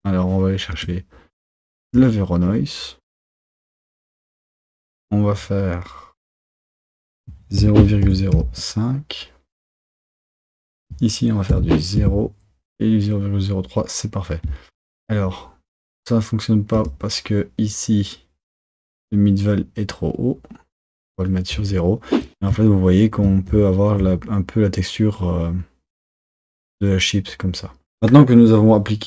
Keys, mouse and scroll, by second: 6.9-9.8 drag, 10.5-13.6 drag, 16.8-21.6 drag.